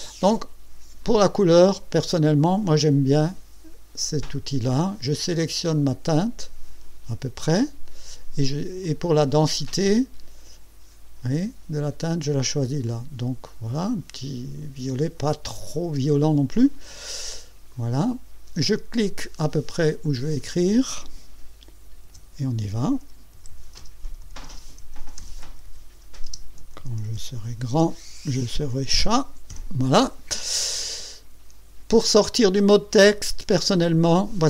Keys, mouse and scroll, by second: 1.0 click, 4.5-7.3 drag, 8.8-14.1 drag, 17.7 click, 20.0 click, 22.0-28.7 typing.